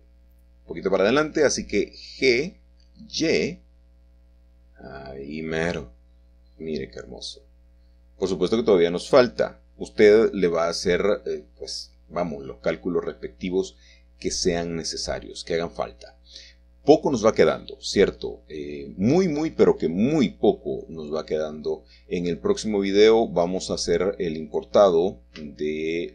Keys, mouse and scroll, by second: 0.8-2.7 middle drag, 3.0 g, 6.7-8.0 shift+drag, 16.1 typing, 18.7-19.0 typing, 21.4 shift+middle click, 22.3 typing, 24.0 shift+middle click, 24.1 shift+click, 24.4-25.5 shift+scroll down 1.